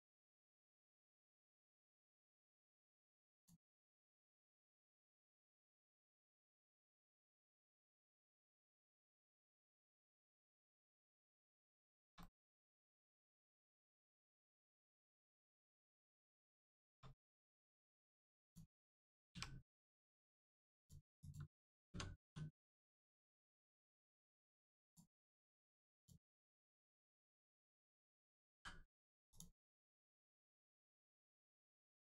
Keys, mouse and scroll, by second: 0.2 middle click, 1.8 scroll down 1, 2.1 middle click, 3.3 click, 3.8 middle click, 4.2 scroll up 1, 4.5 middle click, 4.9 scroll up 1, 5.9 middle click, 6.3 scroll up 1, 7.1 middle click, 7.5 scroll down 1, 8.1 middle click, 8.5 scroll down 1, 9.3 middle click, 11.4 scroll up 1, 11.8 shift+middle click, 12.1 middle click, 12.2 middle click, 12.9 shift+middle click, 13.6 middle click, 13.7 middle click, 14.3 shift+middle click, 14.8 middle click, 14.9 middle click, 15.5 shift+middle click, 17.1 scroll up 1, 17.4-17.7 scroll down 1, 17.7 middle click, 18.4 click, 19.3 1, 20.7 click, 21.8 Tab, 22.2 1, 23.6 click, 25.9 click, 27.1 shift+click, 28.5 click, 29.2 click, 30.0 middle click, 31.5 shift+middle click.